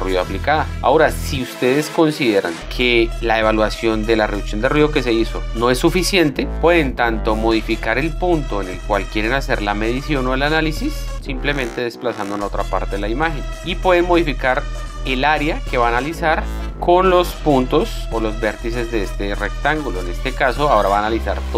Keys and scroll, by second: 0.2 z, 0.7 space.